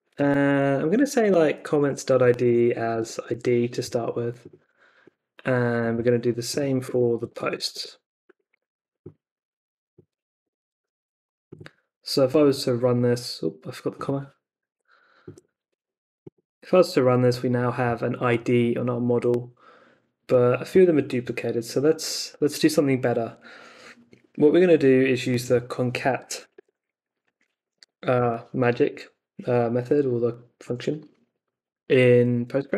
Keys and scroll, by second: 0.0-3.8 typing, 5.9 super+c, 6.8 Return, 7.2 space, 8.2 super+v, 10.1-11.4 typing, 26.1-28.1 typing.